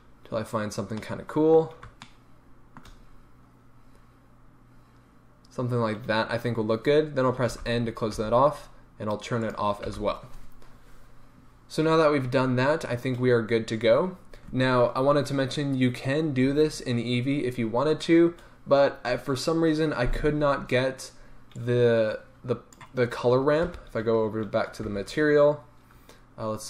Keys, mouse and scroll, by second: 7.5 n, 9.5 click, 9.9 n, 21.5-26.6 drag, 21.7 typing, 23.7 shift+F3.